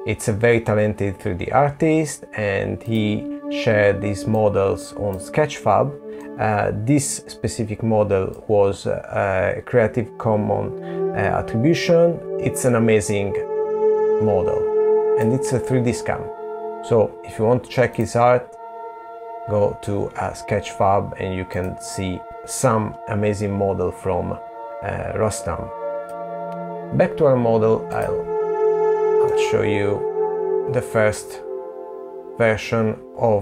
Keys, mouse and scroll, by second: 27.5 middle click.